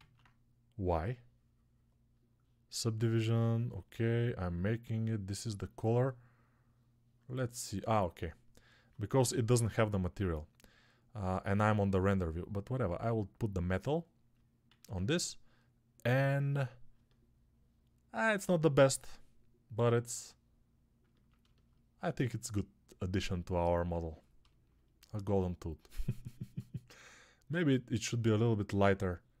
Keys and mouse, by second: 14.5 alt+q, 16.8-29.4 alt+middle drag, 27.3 alt+q.